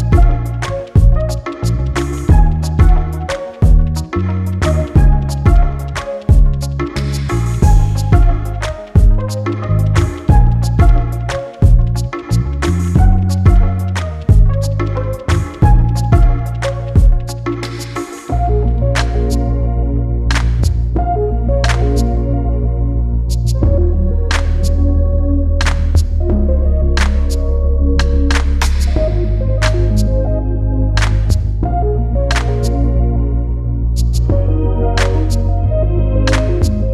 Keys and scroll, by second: 18.5-19.1 typing, 31.8 ctrl+t.